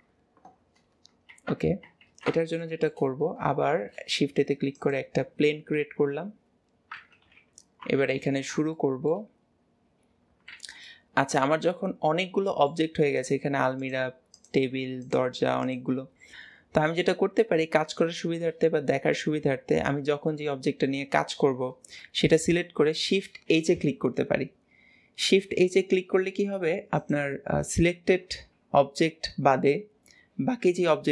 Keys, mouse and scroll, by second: 0.6-2.1 scroll down 1, 2.1 ctrl+s, 2.7 shift+middle click, 3.3 scroll up 2, 3.7 shift+a, 8.2 alt+z, 8.8-10.0 shift+middle drag, 10.0-10.6 scroll down 2, 10.6 alt+z, 10.9-13.2 middle drag, 13.2 click, 13.8 click, 14.4 click, 15.1 click, 15.7 click, 18.2-21.3 middle drag, 23.5 shift+h, 27.0 click, 29.0-31.1 middle drag.